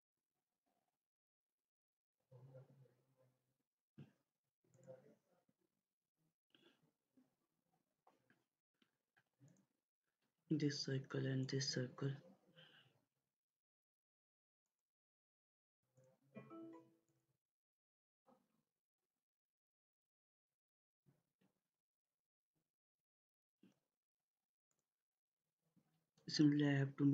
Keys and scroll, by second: 8.6 Escape, 20.1 Escape.